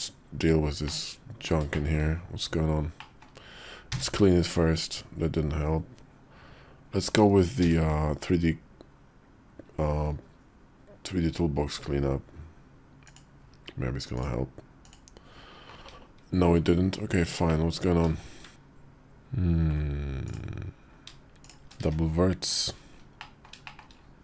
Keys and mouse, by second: 0.8 middle click, 1.6 shift+middle click, 2.8 middle click, 3.8 3, 7.5 n, 14.0 click, 17.4 middle click, 18.5-19.6 middle drag, 20.1 click, 21.7 1, 23.0 middle click, 23.6 shift+middle click.